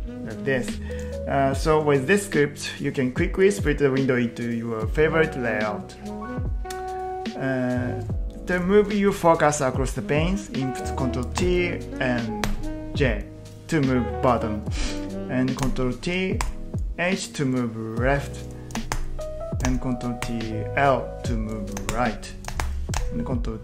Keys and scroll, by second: 11.4 ctrl+t, 12.4 j, 15.6 ctrl+t, 16.4 h, 18.8 ctrl+t, 19.7 ctrl+t, 20.3 l, 21.8 ctrl+t, 22.5 ctrl+t, 23.0 ctrl+t.